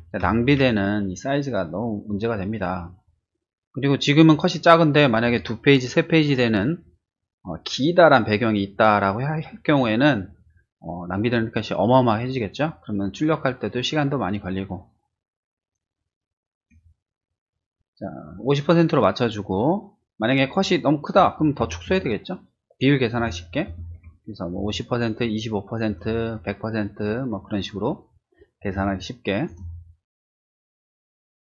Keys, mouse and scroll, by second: 0.2 ctrl+t, 16.7 Escape, 17.8 space, 21.6 ctrl+-, 24.5 ctrl+space, 24.8 click, 28.7 space.